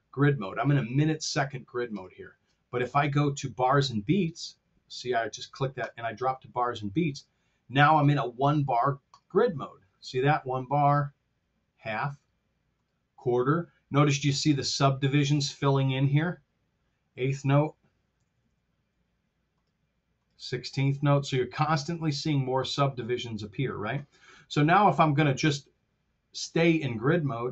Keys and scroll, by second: 18.2 t.